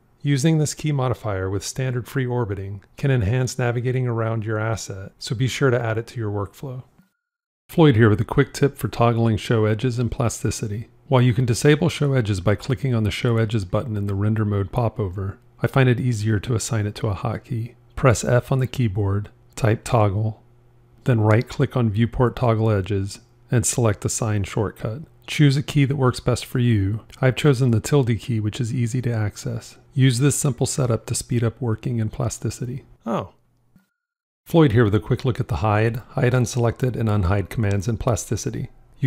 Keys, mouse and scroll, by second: 18.0 f.